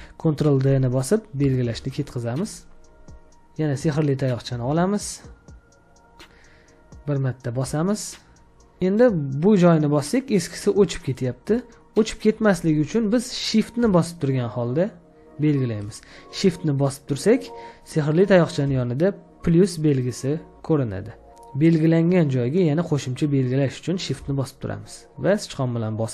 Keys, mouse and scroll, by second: 1.6 ctrl+d, 25.9 shift+click.